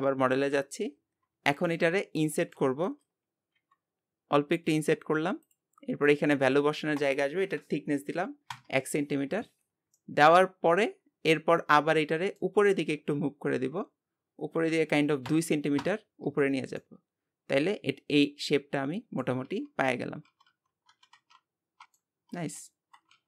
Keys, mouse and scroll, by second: 0.4 KP_7, 1.2 scroll down 2, 1.5 shift+middle click, 2.0 scroll up 4, 2.4-3.6 shift+middle drag, 7.0-9.7 drag, 9.7 scroll down 1, 10.0-11.0 middle drag, 11.0 scroll down 2, 11.3-12.6 middle drag, 12.6 g, 16.2 Tab, 16.8-19.6 middle drag.